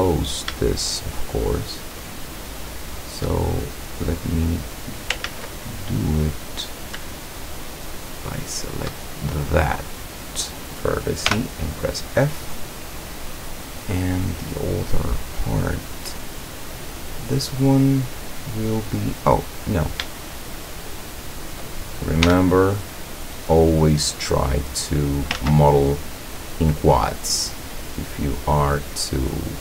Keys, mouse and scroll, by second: 0.0 right click, 0.9 shift+right click, 2.0 shift+right click, 2.6 shift+right click, 3.7 shift+scroll up 1, 4.3 click, 5.0 ctrl+click, 5.3 ctrl+z, 5.6 ctrl+click, 6.2-6.8 ctrl+scroll up 4, 8.4 shift+right click, 9.1 shift+scroll down 2, 9.5-10.6 middle drag, 11.4 f, 12.0 scroll down 2, 12.4-14.7 middle drag, 14.9-15.4 scroll up 2, 15.6 middle click, 16.4 middle click, 16.8 scroll down 1, 17.2-18.9 middle drag, 19.7 right click, 20.4 shift+right click, 21.0 shift+right click, 22.2 f, 23.2 scroll down 2, 24.6 click, 25.4 ctrl+z, 26.1 right click, 26.9-28.5 drag, 28.9 middle click.